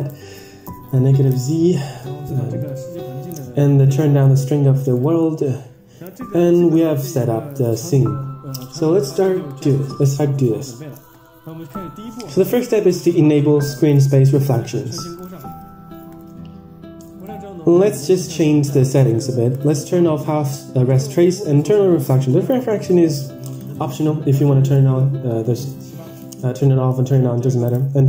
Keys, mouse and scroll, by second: 1.5-2.2 scroll up 2, 2.5-4.2 drag, 4.8 click, 11.5-14.0 scroll down 4, 15.3 click, 17.2 click, 19.6 click, 21.2 click, 23.5-26.8 drag, 27.7-28.0 drag.